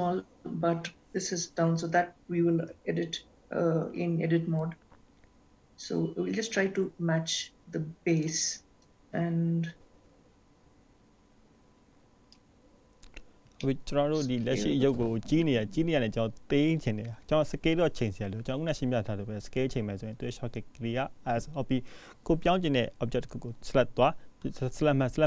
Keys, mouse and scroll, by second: 8.4 click, 9.0 s, 13.6-13.9 scroll down 2, 14.1 shift+middle click, 15.1 click, 15.5 g, 17.6 click, 19.0 g.